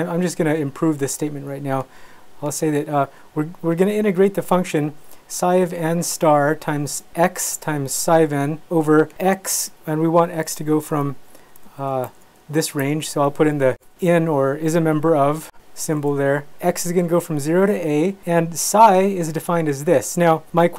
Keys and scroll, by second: 9.3 Right, 9.5 x, 11.1 Escape, 11.5 \, 11.9 i, 12.8 Escape.